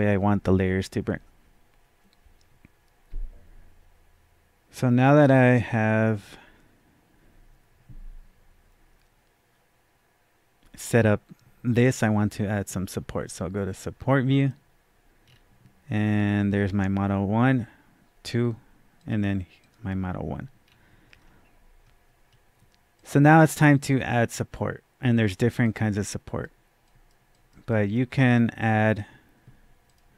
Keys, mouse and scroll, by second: 14.3 scroll down 1, 15.2-16.1 scroll down 1, 16.1-17.9 scroll down 1, 18.9 scroll down 1, 19.0 click, 19.6 click, 20.6 scroll down 1, 21.1 scroll up 1, 21.8-22.9 scroll up 1, 22.9 scroll down 1, 23.0-27.7 drag, 27.7 click, 28.4-30.1 drag.